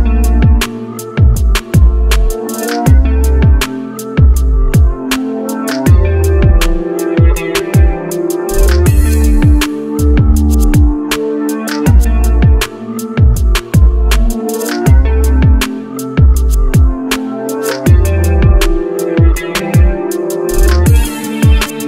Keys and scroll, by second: 0.3 ctrl+v.